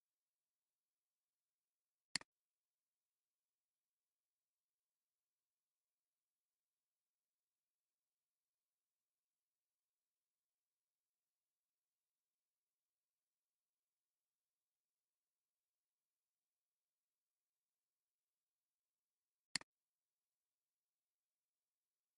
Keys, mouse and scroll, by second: 0.0-0.5 typing, 7.7 scroll down 1, 8.5 typing, 9.7 scroll down 1, 10.4 scroll up 1, 11.2 typing, 12.8 scroll down 1, 13.6 typing, 14.2 scroll down 1, 15.0 typing, 16.2 scroll up 1, 17.0 typing.